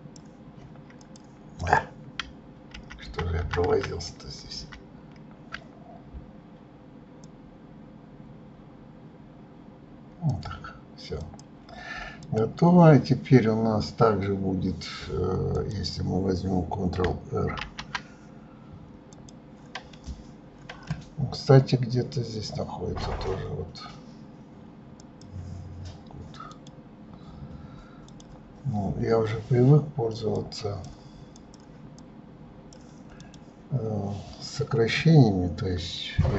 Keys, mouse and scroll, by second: 1.2 click, 1.8 click, 2.9 ctrl+z, 3.2 ctrl+z, 7.4 click, 11.3 click, 12.4 click, 15.7 click, 17.8 ctrl+r, 19.3 click, 25.1-26.8 drag, 28.2 click, 30.5 click, 31.5 click, 32.1-33.5 drag.